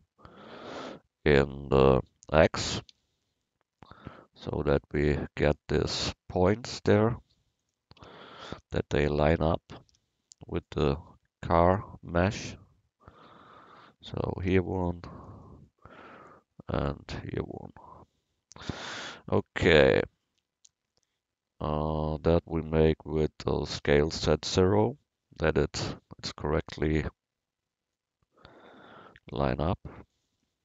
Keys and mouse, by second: 2.7 s, 8.0 Tab, 8.5 a, 9.4 Tab, 9.9 a, 10.3 c, 14.4 a, 14.7 c, 15.3-16.9 drag, 23.8 s, 28.0-29.2 drag, 29.2 a, 29.6 click, 29.6 c.